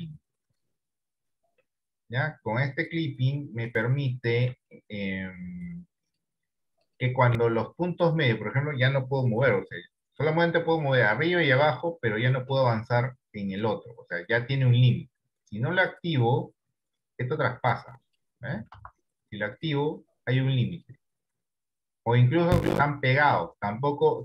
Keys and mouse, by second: 3.2 click, 4.8 shift+middle click, 5.7 click, 9.5 g, 12.8 click, 14.4 click, 16.0 click, 17.2-18.2 drag, 18.8 ctrl+z, 20.4 click, 21.5 click.